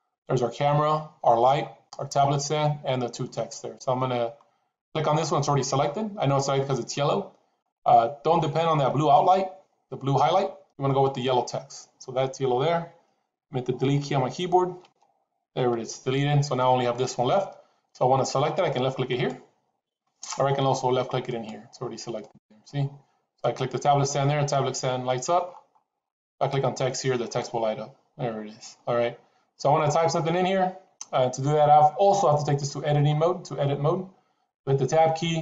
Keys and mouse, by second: 7.6 click, 8.1 click, 10.7 click, 14.7 Delete, 19.0 click, 22.1 click, 27.1 click.